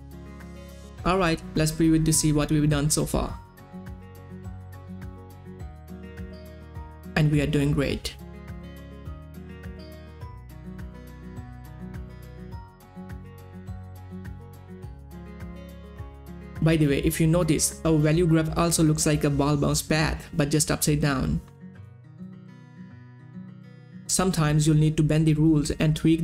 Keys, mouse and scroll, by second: 3.7 space, 9.5 middle click, 13.5 middle click, 13.7-16.5 drag, 16.8 click, 25.7 click, 26.0-26.2 drag.